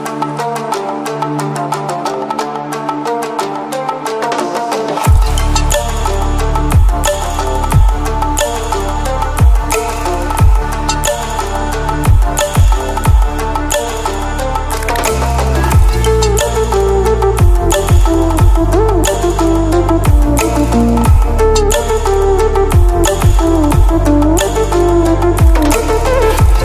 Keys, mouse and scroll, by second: 0.0-3.3 drag, 5.0-6.1 drag, 10.1-10.8 ctrl+alt+scroll down 2, 11.9-12.3 ctrl+alt+scroll up 2, 14.3-15.1 typing, 14.6 click, 14.6-20.8 drag, 17.1-20.3 drag, 21.1-21.7 click, 22.3-24.5 drag.